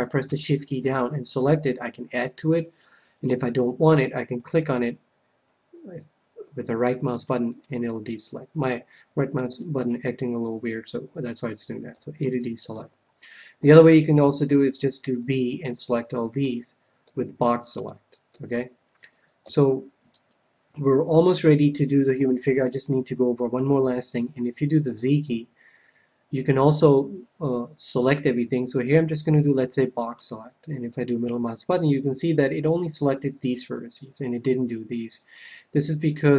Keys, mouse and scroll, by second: 1.4-3.1 right drag, 4.3-6.2 right drag, 6.9-9.3 right drag, 11.9 a, 12.7 KP_1, 14.4 b, 17.0-18.5 middle drag, 18.5 KP_1, 19.4 a, 24.8 z, 28.9 b, 30.8-32.6 middle drag.